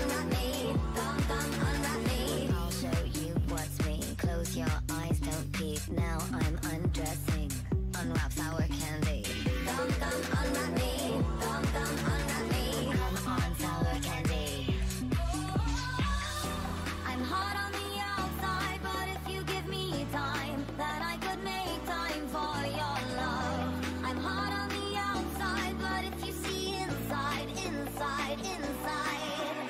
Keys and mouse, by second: 0.0 Tab, 2.3 Tab, 2.8 a, 3.1 c, 4.5 click, 4.7 w, 5.2 Tab, 6.7 Tab, 7.0 a, 7.2 c, 8.7 w, 9.2 Tab, 11.7 Tab, 12.3-13.7 drag, 12.5 w, 12.8 Tab, 13.9 click, 13.9 middle click, 13.9 right click, 16.7 Tab, 17.3 a, 17.5 c, 19.2 w, 19.8 w, 21.0 a, 21.3 c, 22.7 w, 23.6 Tab, 26.3 Tab, 26.7-29.6 typing.